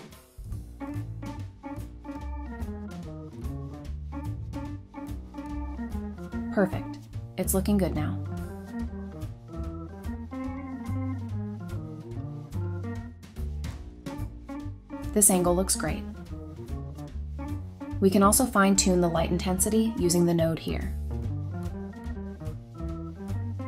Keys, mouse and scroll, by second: 0.0-0.6 typing, 2.9-3.8 typing, 3.9 Return, 5.9-6.8 typing, 10.0-10.9 typing, 18.0-19.1 typing, 20.7-21.4 typing.